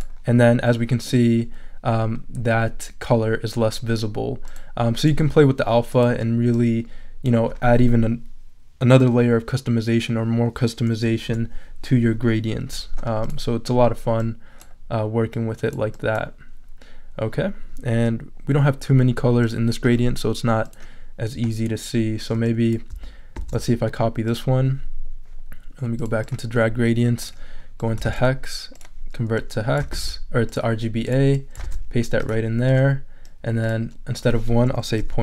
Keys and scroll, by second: 11.3 BackSpace, 12.6 5, 23.3 super+c, 28.0 super+v, 29.9 super+c, 31.6 super+v, 34.7-35.2 typing.